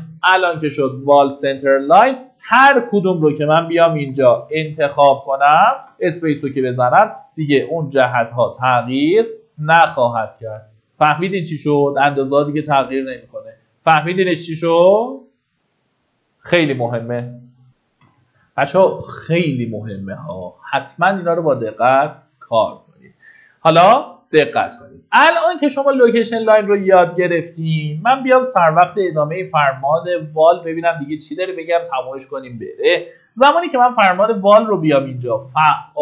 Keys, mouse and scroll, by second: 1.1-1.6 scroll up 1, 1.6 click, 2.3 scroll up 1, 3.5 Tab, 5.0 click, 7.7 Tab, 8.1 click, 12.9-14.1 scroll down 1, 14.1 middle click, 16.9-18.0 scroll down 1, 18.2 F9, 22.0 click, 24.9-25.8 scroll down 1, 27.5 click, 29.1 Delete, 30.0 click, 30.7 Delete, 31.4 middle click, 31.7-32.6 typing.